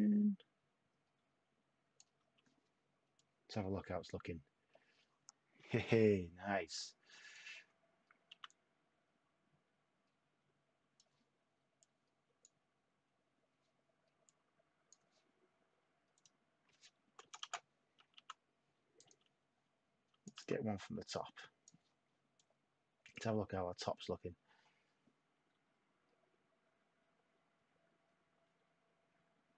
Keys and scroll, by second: 0.0-0.6 typing, 2.1 y, 4.3 y, 8.3 t, 17.2 Return, 17.4 Return, 18.1 t.